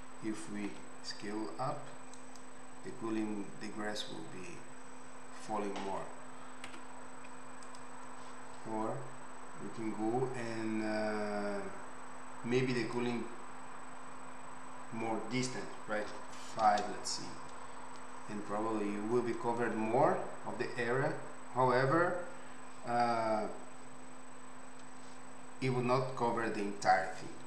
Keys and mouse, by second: 0.7 s, 6.2 Escape, 6.6 Escape, 7.6 click, 9.7-12.9 middle drag, 12.9-27.4 drag.